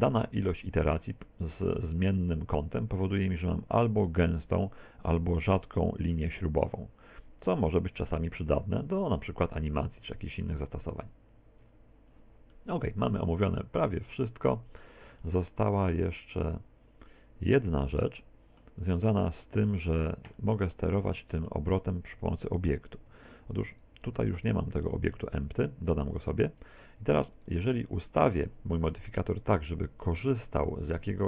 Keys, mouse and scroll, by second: 0.0 click, 0.4 click, 3.0 click, 12.5 middle click, 13.6 middle click, 15.3 middle click, 18.1 middle click, 19.2 middle click, 20.4 middle click, 23.2 Tab, 23.8 right click, 24.2 right click, 24.4 right click, 25.4 shift+a, 27.4 right click, 28.2 right click, 31.1 click.